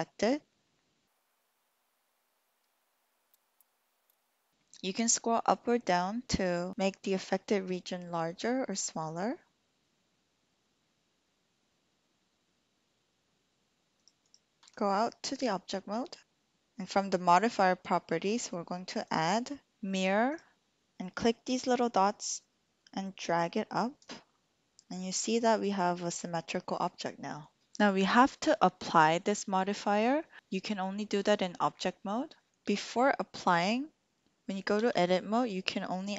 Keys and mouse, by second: 3.2 click, 4.1 s, 13.9 click, 14.7 Tab, 15.3 click, 19.1-20.4 drag, 22.8-24.1 drag, 32.5 ctrl+z, 34.4 Tab, 34.8 Tab.